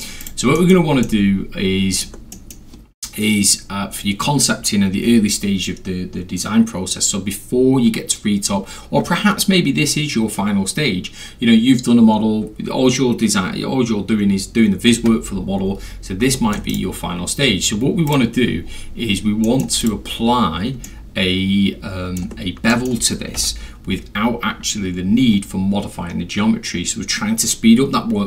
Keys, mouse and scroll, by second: 0.2 click, 0.6 middle drag, 0.6 scroll, 0.7 scroll down 2, 0.9 scroll, 1.0 alt+middle click, 2.0-2.4 alt+scroll, 2.3 alt+middle click, 2.5 scroll up 2, 2.6-3.7 scroll, 16.4 middle drag, 16.7 right click, 18.1 click, 18.6 scroll down 2, 18.8-19.5 scroll, 19.5 middle drag, 19.8 click, 20.9-22.2 alt+middle drag, 22.7 alt+middle drag, 23.4 p.